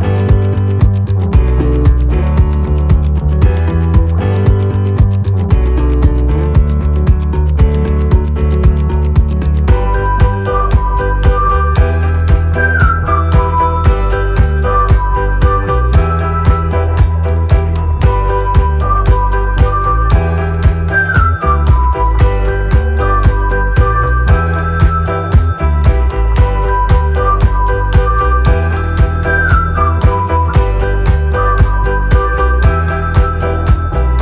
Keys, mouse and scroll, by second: 1.8 alt+click, 4.3 click, 5.4 click, 6.0 alt+click, 7.0 click, 9.5 alt+Num_Lock, 9.8 alt+click, 11.1 click, 17.4 click, 23.8 ctrl+KP_2, 25.5 click, 31.5 click.